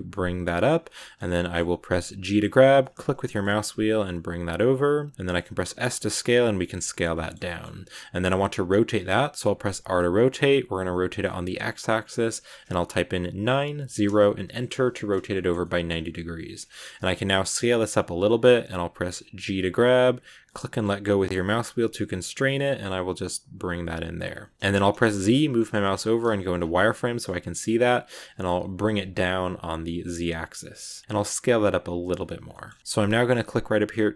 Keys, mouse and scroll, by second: 0.9 shift+middle click, 1.1 scroll up 1, 1.2-2.2 middle drag, 2.2 g, 5.1-5.5 scroll up 4, 5.5 s, 6.7-7.7 shift+middle drag, 7.7 scroll up 1, 9.6 r, 14.5-16.5 middle drag, 16.5 scroll up 1, 16.5 shift+middle click, 17.3 s, 24.4 shift+middle click, 24.5 scroll down 1, 24.8 z, 26.5 scroll up 1, 26.6 middle click, 27.3 s, 27.7 middle click, 28.1 g, 30.6 scroll down 1, 30.6 middle click, 31.0 s, 32.4 middle click, 32.6 scroll up 2, 32.8-34.1 shift+middle drag.